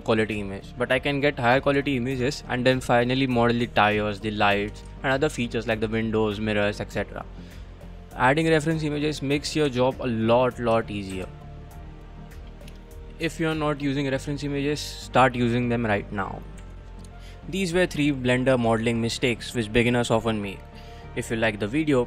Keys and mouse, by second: 2.0 shift+middle drag, 4.4 shift+middle drag, 5.0 shift+middle click, 9.2-9.6 middle drag, 9.7 Tab, 11.1 shift+z, 11.5 middle click, 13.1 middle click.